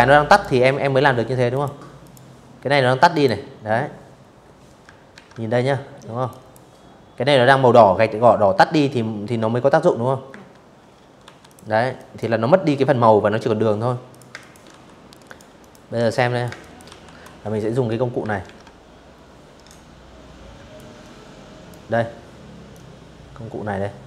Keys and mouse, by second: 0.8 click, 2.8 ctrl+1, 3.9 click, 8.0 Escape, 8.9 v, 9.1 click, 9.6 click, 11.8 click, 12.0 space, 12.0 click, 12.3 v, 12.9 click, 13.3 click, 13.6 z, 13.8 click, 14.1 space, 14.3 click, 14.5 v, 16.1 ctrl+1, 18.4 ctrl+click, 20.3-21.8 ctrl+drag.